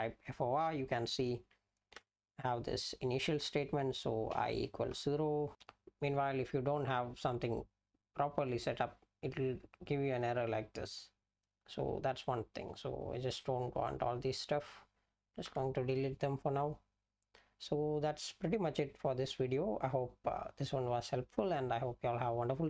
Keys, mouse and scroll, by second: 0.0-0.3 typing, 2.0 Return, 4.3 i, 4.9 =, 5.5 Right, 13.4 click, 14.3 click, 15.5 BackSpace.